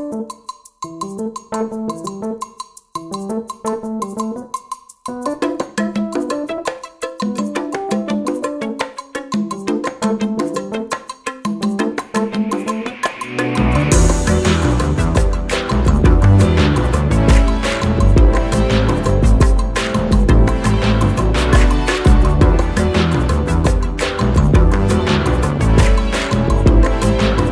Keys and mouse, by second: 3.8-7.5 shift+drag, 9.2-11.3 drag, 14.5-15.8 drag, 16.4 Up, 19.1 click, 21.8 click, 23.3-26.0 alt+drag.